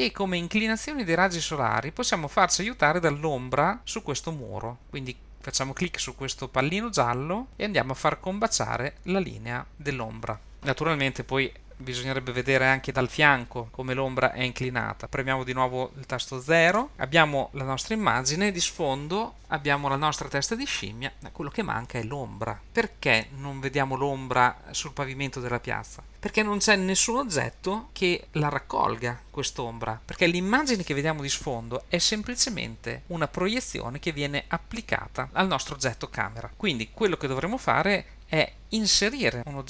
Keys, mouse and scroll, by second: 4.8 shift+middle click, 4.8 scroll up 4, 6.4 click, 6.7-10.5 drag, 12.9 scroll down 3, 12.9 KP_3, 13.4-13.9 scroll up 3, 16.9 KP_0.